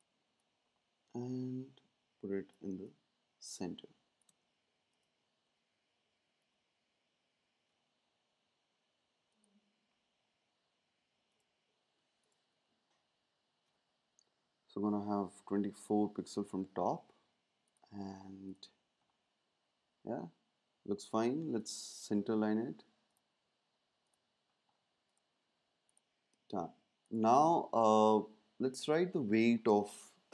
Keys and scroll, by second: 2.7 space, 14.2 Up, 14.4 Up.